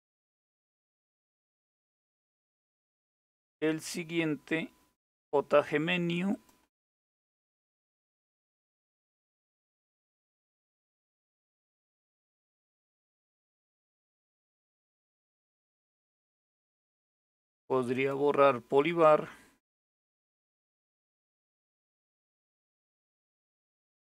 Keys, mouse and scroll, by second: 0.8 click, 3.9-4.5 scroll down 2, 4.5-5.9 scroll down 1, 5.9 click, 6.4 right click, 13.7 click, 15.2-17.6 scroll down 3, 17.6-21.1 right drag, 21.1 click, 22.4 click, 22.8 right click.